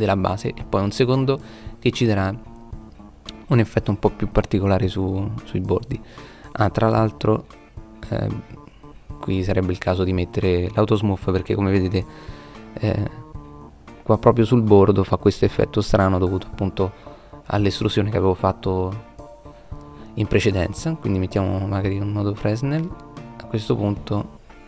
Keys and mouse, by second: 3.2 middle click, 10.8 middle click, 14.7-15.2 middle drag, 17.4-20.2 middle drag, 20.4 middle click, 22.6 middle click, 23.5 middle click, 23.9-24.6 middle drag.